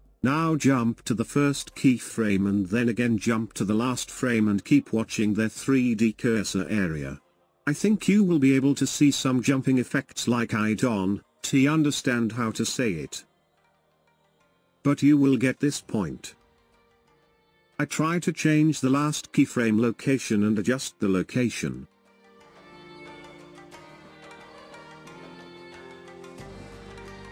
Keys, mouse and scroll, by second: 3.8-11.0 drag, 11.3-17.7 drag, 19.1 click, 21.2-24.2 shift+drag.